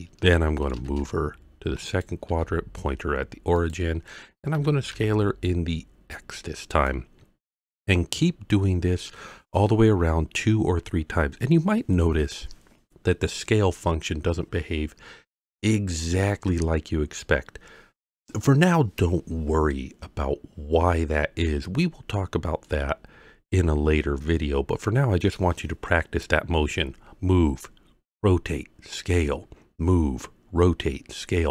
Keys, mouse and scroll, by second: 0.6 g, 0.9 shift+z, 1.9 click, 2.3 r, 2.4 z, 3.6 click, 4.5 s, 4.9 x, 6.7 click, 22.6-25.4 middle drag.